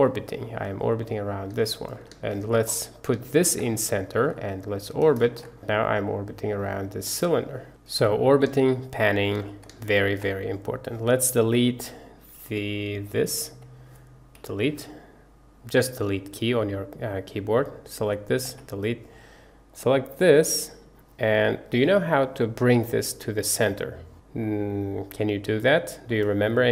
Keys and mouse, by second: 1.6 shift+click, 2.3 shift+drag, 3.3 shift+drag, 4.0 shift+click, 4.4-4.8 middle drag, 5.0 shift+middle click, 5.5-8.5 middle drag, 8.7-9.3 shift+middle drag, 9.5 click, 9.9 shift+click, 10.3 click, 13.0 click, 14.4 Delete, 17.7 click, 18.5 Delete, 24.5-26.1 drag.